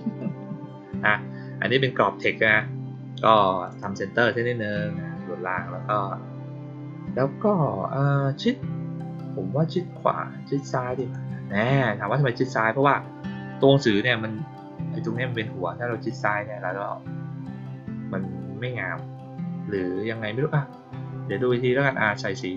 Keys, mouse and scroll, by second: 3.6 click, 10.9 click, 22.3 click.